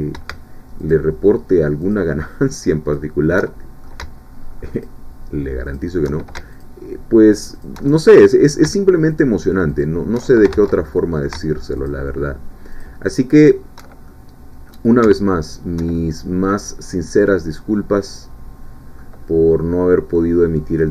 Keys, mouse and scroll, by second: 0.9-2.1 alt+shift+drag, 2.9 alt+shift+click, 3.4 alt+shift+middle click, 4.8-5.9 alt+shift+drag, 6.6 alt+shift+click, 7.5 alt+shift+click, 7.9 alt+shift+middle click, 9.1 alt+shift+click, 9.8 alt+shift+click, 10.5 ctrl+alt+shift+z, 10.8 ctrl+alt+shift+middle click, 11.9 alt+shift+click, 12.7 alt+shift+click, 14.1 alt+shift+middle click, 15.9-19.4 alt+shift+middle drag, 19.4-19.8 scroll down 1, 20.2 middle click, 20.8 scroll up 1.